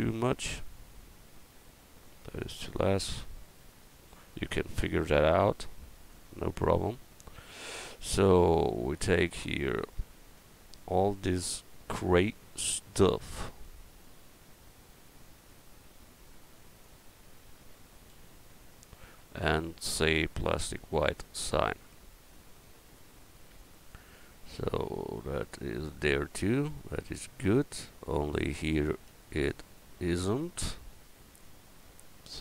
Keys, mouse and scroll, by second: 1.4-3.2 drag, 8.0 Tab, 18.1 l, 20.7-21.9 drag, 21.9 Tab, 25.9-27.7 middle drag, 28.7 right click, 29.1 Tab, 30.4 middle click.